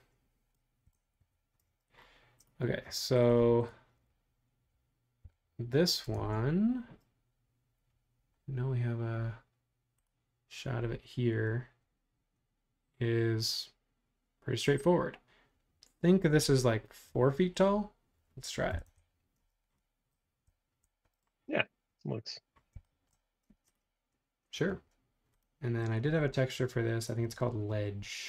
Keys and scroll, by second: 1.2 Home, 5.2 p, 6.1 super+Tab, 16.4 super+Tab, 18.3-19.4 typing, 23.6 space.